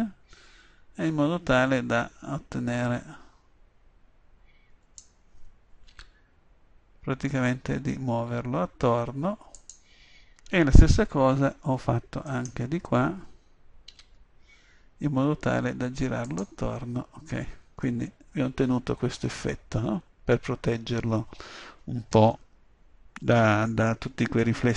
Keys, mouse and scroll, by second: 6.1 g, 9.8-11.7 drag, 12.4-14.0 drag, 14.0 g, 16.5-18.0 drag, 18.0-19.8 middle drag, 24.6 middle click.